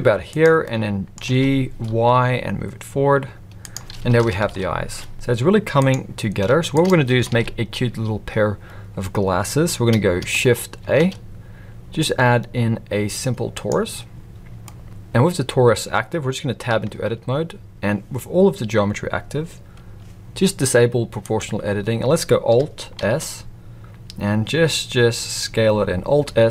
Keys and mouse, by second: 0.6-1.1 middle drag, 1.2 g, 4.1 KP_1, 4.4 alt+a, 6.4 g, 7.3 alt+a, 10.8 shift+a, 14.6 middle drag, 16.7 Tab, 21.2 click, 23.0 alt+s.